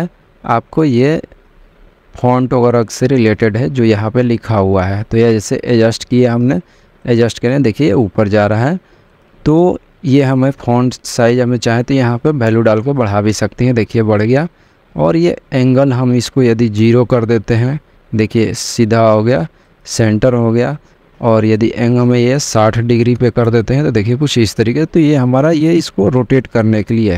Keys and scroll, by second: 11.5-12.7 typing, 13.0 Return, 17.3 0, 17.6 Return, 23.3 6, 23.7 0, 24.0 Return.